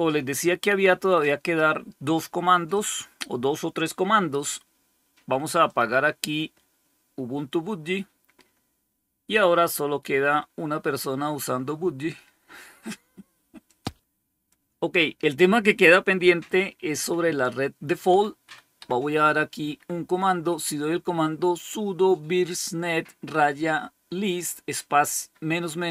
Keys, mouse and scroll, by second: 2.6 click, 5.5 click, 13.5 click, 18.0 Up, 18.3 Up, 18.7 Up.